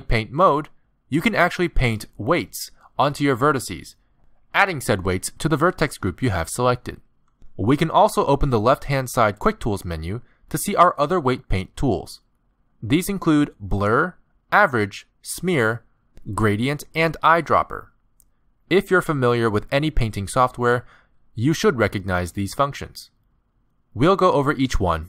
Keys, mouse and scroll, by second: 0.2 middle click, 2.3 click, 4.8 middle click, 8.1 middle click, 8.6 ctrl+z, 10.7 click, 21.3 middle click.